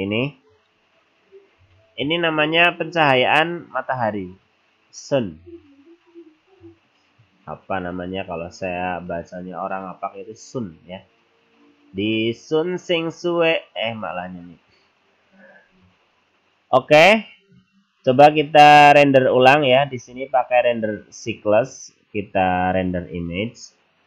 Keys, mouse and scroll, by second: 21.6 click.